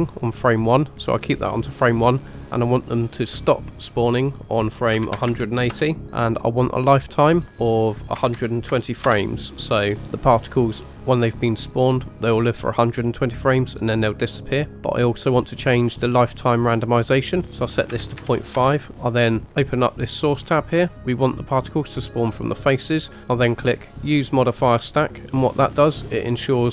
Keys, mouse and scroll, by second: 0.3-2.0 drag, 2.4-5.7 drag, 7.3-10.7 drag, 17.3-18.5 drag, 19.6 click, 20.4-21.8 scroll down 2, 23.2 click, 24.3 click, 26.2 click.